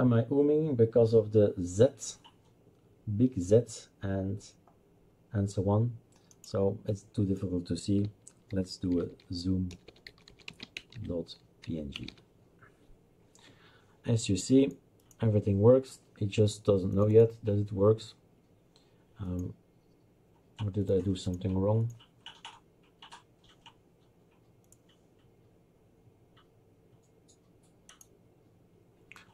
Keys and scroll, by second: 8.3-12.6 typing.